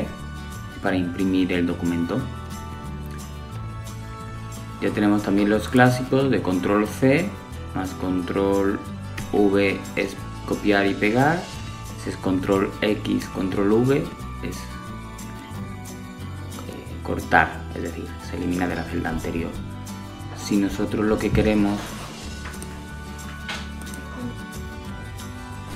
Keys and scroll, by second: 2.4 super+c, 6.3 super+v, 11.7 super+x, 14.4 super+v.